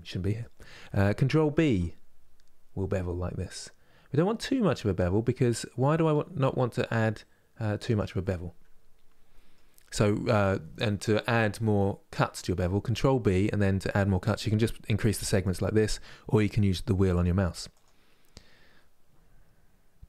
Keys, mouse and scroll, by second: 1.2 ctrl+b, 7.9-11.0 middle drag, 14.8-20.0 drag.